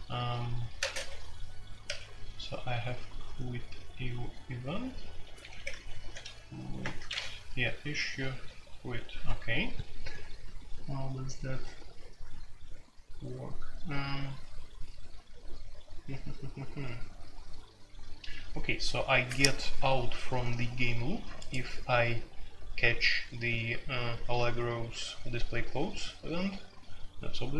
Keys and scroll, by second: 0.0-1.8 typing, 4.8-6.1 typing, 6.8 Return, 8.1-8.8 typing, 11.5-11.9 typing, 18.9 j.